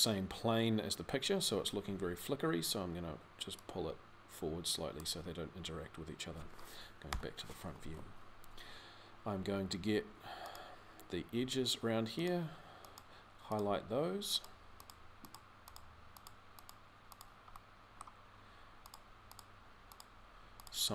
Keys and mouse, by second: 6.9 KP_3, 17.0 middle click, 17.5 click.